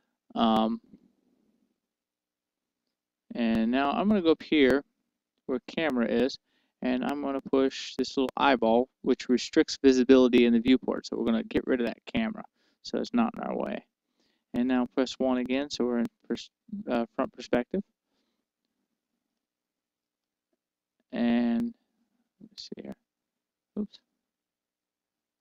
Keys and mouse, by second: 0.0-5.4 middle drag, 14.0-15.8 drag, 16.5-18.4 middle drag, 17.8 KP_1, 18.8-24.9 middle drag.